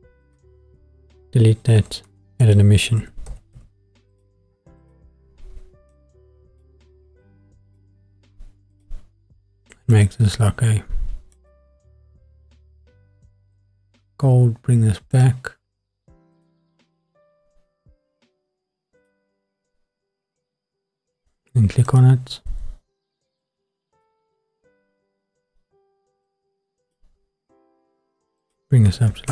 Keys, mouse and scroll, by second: 0.2 click, 0.9 Delete, 2.1 shift+a, 5.9-8.3 drag, 8.7-11.8 drag, 13.5 scroll down 2, 15.1 click, 16.6 click, 19.0 click, 21.8 click, 23.4-24.1 drag, 26.3 click, 26.6 click, 28.4 click.